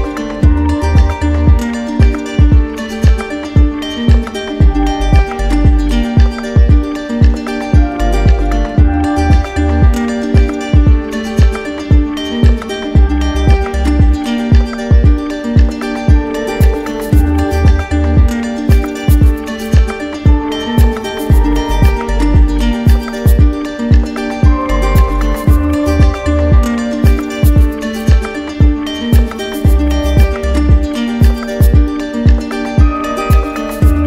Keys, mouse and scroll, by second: 0.1 ctrl+z, 2.9 click, 5.9 click, 6.5 click, 7.2 click, 7.7 click, 16.7 click, 17.0 ctrl+z, 18.7 click, 20.6 click, 21.5 1, 21.9 Return, 24.7 click, 25.4 ctrl+z, 26.4 click, 27.4-28.5 drag, 30.4-31.5 drag.